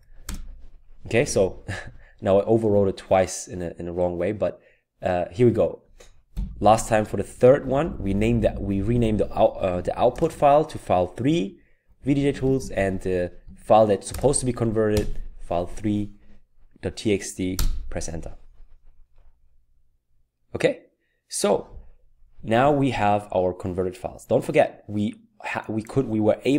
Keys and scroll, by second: 0.2 typing, 6.3 Up, 7.6-15.0 typing, 17.6 Return.